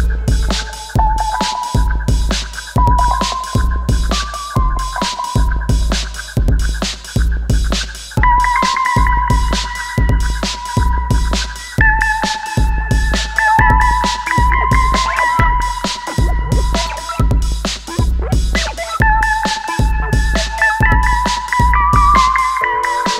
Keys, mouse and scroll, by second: 2.3 alt+scroll down 1, 2.9 space, 2.9-3.3 click, 3.2 space, 3.5 alt+scroll up 1, 4.3-6.4 alt+drag, 8.5 alt+scroll up 1, 9.6 click, 11.7 ctrl+a, 12.9-13.9 typing, 15.2 space, 15.3 shift+Home, 16.2-19.1 typing, 19.8 click, 21.3 alt+scroll down 1, 21.7-22.1 click, 22.2 alt+scroll up 1.